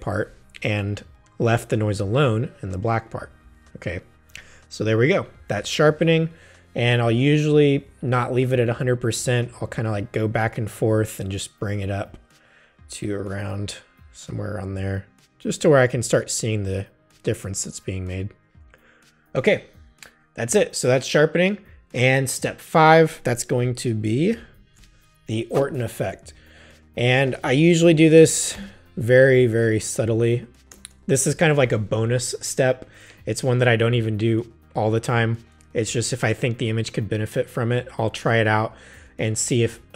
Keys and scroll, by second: 24.5 alt+shift+super+e, 27.5-29.1 typing, 30.7 Return.